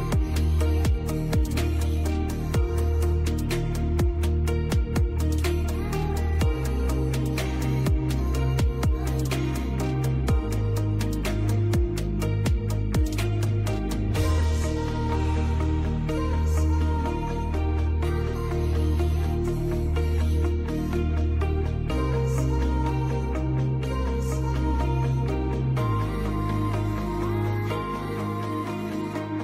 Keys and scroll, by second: 2.0 Delete, 3.9 Delete, 12.2 F2, 13.0 ctrl+g, 13.5 c, 16.6 ctrl+u, 17.0 Escape, 20.0 ctrl+g, 21.5 c, 22.7 Escape, 26.2 space, 26.5 F2, 27.0 ctrl+q, 27.5 F10.